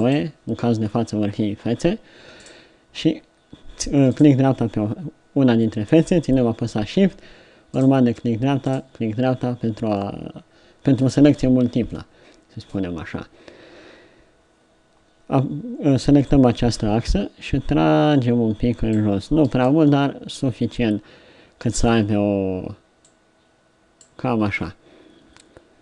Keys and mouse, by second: 10.2-14.9 middle drag, 16.3-18.0 right drag, 19.5 Tab, 19.9-21.7 middle drag, 22.1 Tab, 23.1 middle click, 24.4 Tab, 25.0-25.8 middle drag.